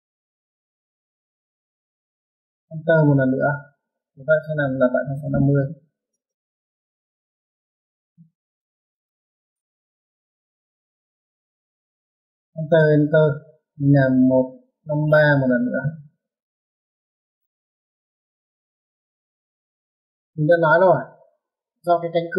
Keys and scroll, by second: 3.0-4.0 typing, 5.3-6.3 typing, 12.9 space, 13.3 space, 14.5-16.2 typing, 20.2 space.